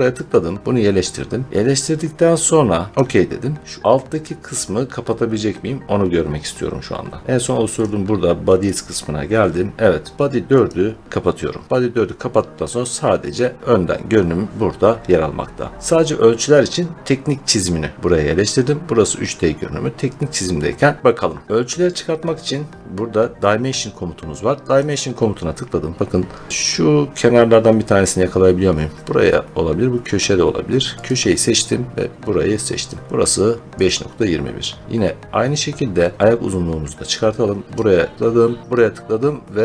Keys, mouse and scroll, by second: 7.7 click, 8.6 click, 10.5 click, 12.9 click, 14.4 click, 19.9 middle click, 20.3-20.8 scroll, 21.9-22.9 scroll, 24.7 click, 26.5 scroll, 30.9 click, 32.7 click, 33.7 click, 34.6-36.4 scroll, 37.6 click, 38.6 click.